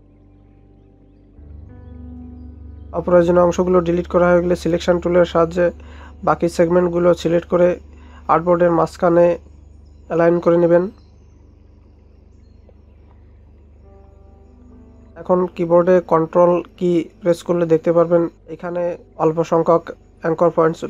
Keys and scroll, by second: 3.0 ctrl+0.